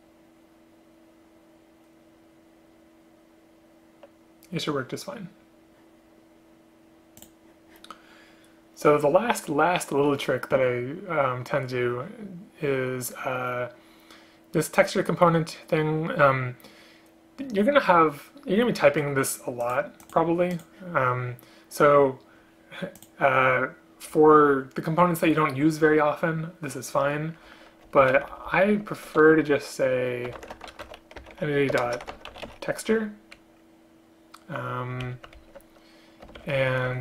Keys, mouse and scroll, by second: 28.1 shift+End, 28.4 ctrl+shift+Left, 28.6 ctrl+shift+Left, 31.8 BackSpace, 35.5 ctrl+Left, 36.5 ctrl+shift+Right, 36.7 ctrl+shift+Right, 36.8 ctrl+shift+Right.